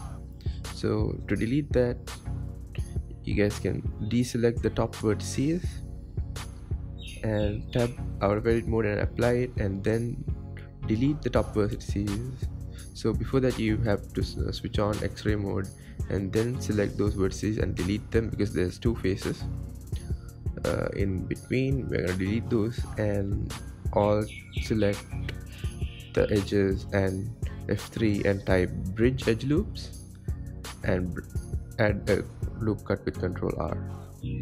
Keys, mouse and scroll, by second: 0.3-0.8 scroll down 2, 0.8 Tab, 1.2 scroll down 6, 1.9-2.6 scroll down 1, 2.6 shift+middle click, 3.4-3.9 scroll up 5, 3.9 shift+middle click, 4.3-4.8 scroll up 4, 4.8 shift+middle click, 5.6-6.4 scroll up 2, 8.1 Tab, 8.9 click, 9.4 Tab, 10.1-11.4 scroll up 1, 11.4 click, 13.0 x, 14.7 ctrl+z, 16.3 click, 18.0 alt+z, 18.7 alt+z, 19.2 alt+z, 19.8 alt+z, 20.2-20.6 scroll up 1, 20.6 shift+middle click, 21.4-21.7 scroll up 1, 21.7 click, 23.2 x, 24.2-25.2 scroll up 2, 25.2 alt+click, 26.3 alt+shift+click, 27.8 F3, 32.3 ctrl+r, 33.3 Tab, 33.5-34.4 scroll down 22.